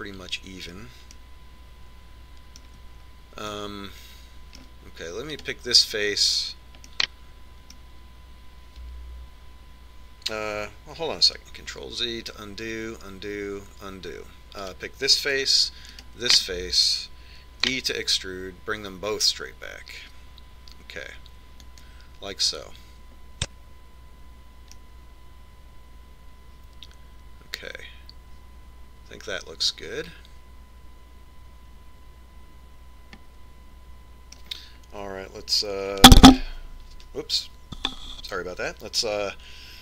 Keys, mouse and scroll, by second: 2.8-4.6 middle drag, 5.1-6.8 middle drag, 7.0 right click, 8.5-10.4 middle drag, 13.4 ctrl+z, 14.2 ctrl+z, 15.1 ctrl+z, 16.3-19.3 right drag, 19.4 e, 26.6-28.5 middle drag.